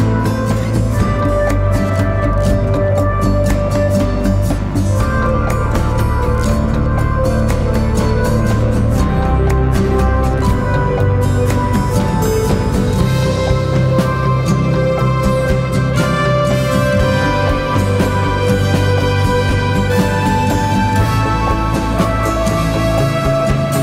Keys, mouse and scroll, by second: 8.0 double click, 11.8 double click, 21.7-22.4 typing.